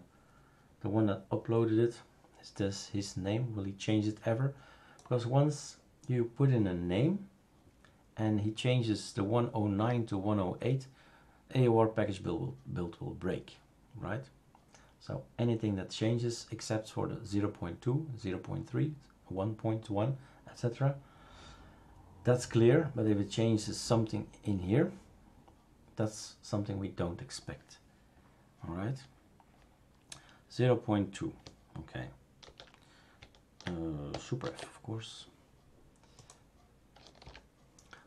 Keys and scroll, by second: 32.4 ctrl+f, 34.4 super+f, 37.2 super+f.